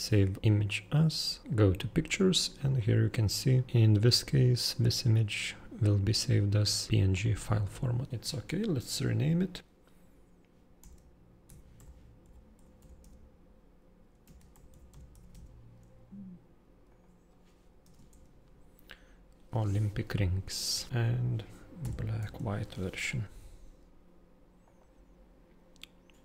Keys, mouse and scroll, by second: 0.6 super+click, 1.4 super+click, 1.4-2.2 super+scroll, 2.3 super+click, 2.7 super+click, 7.1 super+click, 7.8 super+click, 10.8 shift+super+o, 11.4 super+l, 11.8 super+y, 12.2 super+m, 12.6 super+p, 12.8 super+i, 13.0 super+c, 14.2 shift+super+-, 14.5 super+r, 14.7 super+i, 14.9 super+n, 15.1 super+g, 15.3 super+s, 16.9 super+click, 17.8 super+BackSpace, 18.2 shift+super+r, 20.9 shift+super+-, 21.8 shift+super+b, 22.2 shift+super+w, 24.6 super+click.